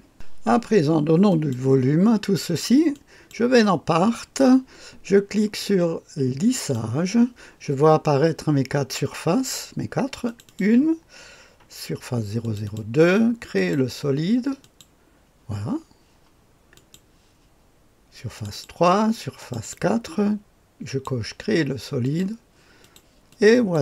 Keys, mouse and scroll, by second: 1.2 click, 2.8 click, 6.5 click, 10.2 click, 12.3 click, 12.6 click, 13.5 click, 14.5 click, 16.6 click, 18.3 click, 18.5 click, 19.3 click, 19.5 click, 20.8 click, 22.0 click, 22.7 click, 23.2 click.